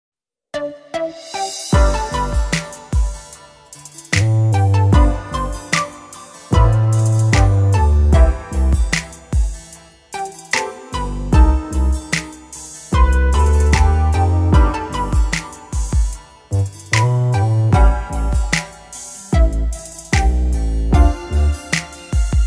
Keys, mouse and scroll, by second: 1.4 shift+a, 4.8-6.8 drag, 7.7-9.3 middle drag, 9.3 KP_1, 10.2 KP_5, 11.2 Tab, 11.9 s, 16.7 ctrl+r, 19.9 s.